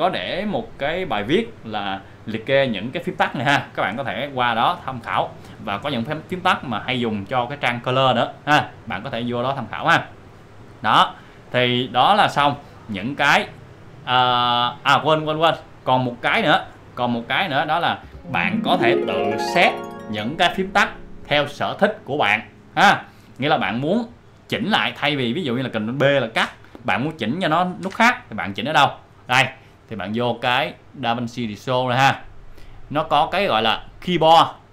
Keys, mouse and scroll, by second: 25.6 click, 26.4 ctrl+b, 27.7 ctrl+b, 30.4 ctrl+z.